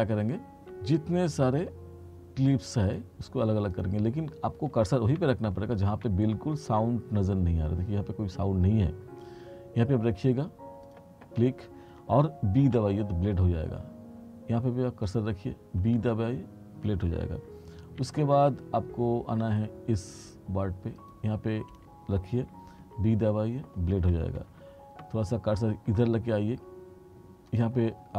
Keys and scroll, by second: 5.2 t, 12.7 b, 15.9 b, 18.1 r, 22.9 b.